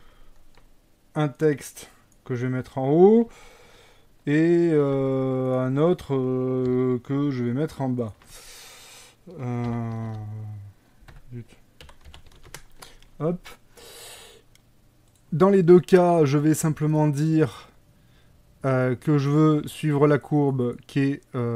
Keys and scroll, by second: 4.9 shift+a, 6.7 g, 9.7 r, 10.0 KP_9, 10.1 KP_0, 11.2 Escape, 11.9 r, 12.2 x, 12.4 KP_9, 12.4 KP_0, 12.6 Return.